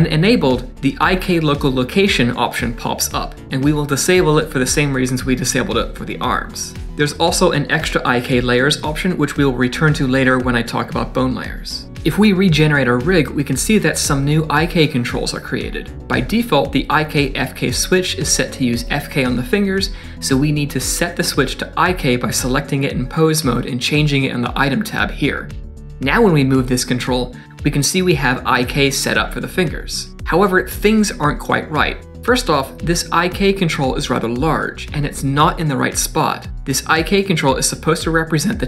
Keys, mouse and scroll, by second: 0.1 click, 13.5 click, 13.8 click, 14.1 scroll down 1, 14.2 middle click, 15.2 shift+click, 15.4 Tab, 16.0 click, 16.2 middle click, 16.4 scroll up 2, 16.6 shift+middle click, 17.0 click, 18.8 middle click, 25.6 click, 25.6 middle click, 26.3 g, 31.9 middle click, 33.4 click, 34.3 click, 37.4 click, 37.9 click.